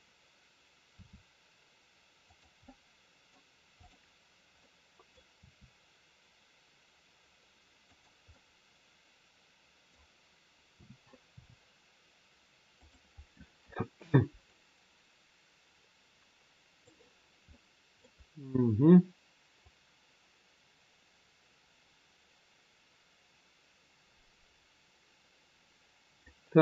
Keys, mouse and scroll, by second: 1.0 r, 2.6 middle click, 3.7 click, 4.6 middle click, 5.5 r, 8.2 middle click, 10.7 a, 11.2 i, 14.5 click, 17.1 scroll down 1, 17.5 middle click, 18.1 scroll down 2, 19.6 click.